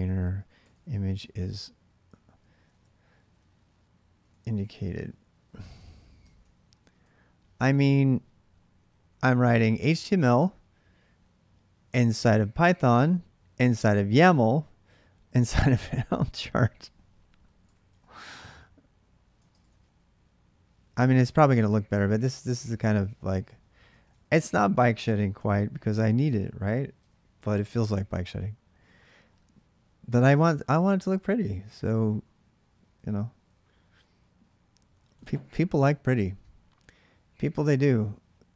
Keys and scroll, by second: 0.0-7.3 typing, 8.5-9.5 typing, 9.6 Return, 11.7 ctrl+[, 11.9-17.4 typing, 17.6 Return, 19.1-19.9 typing, 21.0 ctrl+[, 21.2 typing, 21.4 Return, 23.7 ctrl+[, 23.9 typing, 24.1 Return, 24.6 ctrl+a, 25.1 3, 26.0 ctrl+[, 26.2-27.2 typing.